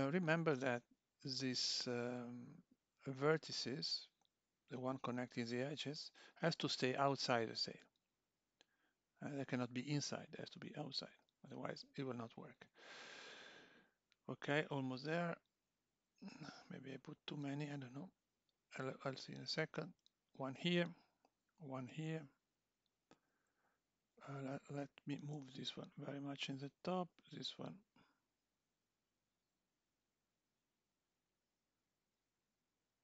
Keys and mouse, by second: 0.0 click, 0.1 g, 2.6 click, 2.8 g, 6.0 click, 6.2 g, 8.9 click, 9.0 g, 12.3 click, 12.5 g, 14.5 click, 14.6 g, 16.7 click, 16.8 g, 18.6 click, 18.7 g, 21.2 click, 21.4 g, 23.7 g, 24.7 click, 25.4 g, 27.0 g, 28.5 click, 28.8 g, 31.7 click, 31.8 g.